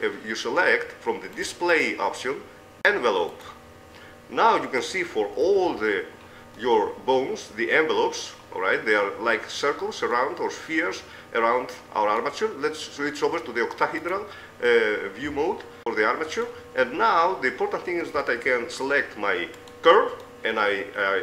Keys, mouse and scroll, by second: 3.8-5.4 middle drag, 5.6-6.6 drag, 6.0 a, 6.6 middle click, 7.5 middle click, 8.7-10.5 middle drag, 10.9 middle click, 13.4-14.5 middle drag, 15.3 middle click, 16.1 click, 19.8 ctrl+Tab, 19.8 right click.